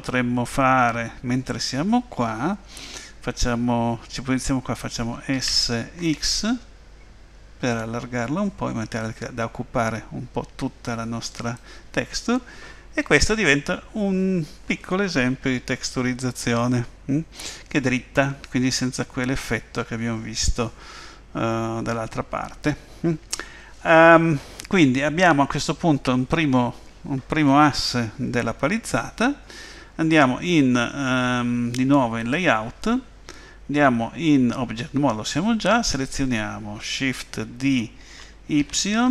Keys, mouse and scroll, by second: 32.3 click, 35.9 click, 38.0 shift+d.